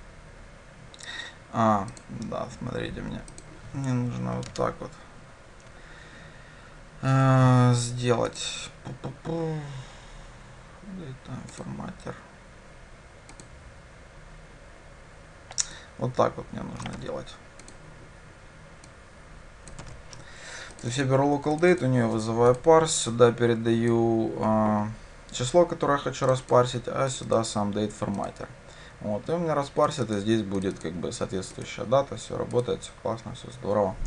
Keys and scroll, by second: 17.0 ctrl+c, 19.9 ctrl+v, 32.7 ctrl+shift+F10.